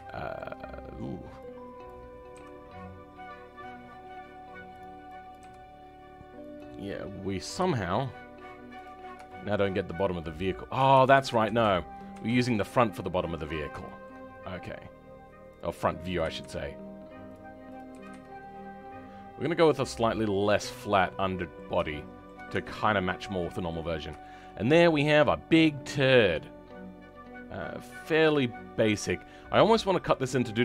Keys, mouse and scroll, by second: 0.0 shift+middle click, 0.7-1.8 scroll up 1, 1.8 click, 2.3 g, 5.2 click, 5.3 g, 7.3 click, 7.5 g, 8.9 scroll down 2, 9.2 shift+middle click, 10.1 click, 10.8 ctrl+z, 11.0 ctrl+z, 13.8 shift+middle click, 14.2-14.7 scroll down 2, 14.7-15.5 scroll up 2, 15.5-16.2 scroll up 1, 16.2-17.7 scroll up 1, 17.7-19.8 scroll up 1, 19.8-20.2 scroll up 1, 20.2-20.5 scroll down 3, 20.8 middle click, 21.0 middle click, 22.4 Tab, 22.7 middle click, 23.8-24.1 scroll down 3, 24.1 shift+middle click, 24.5 scroll up 3, 24.8-28.7 middle drag, 27.8 right click.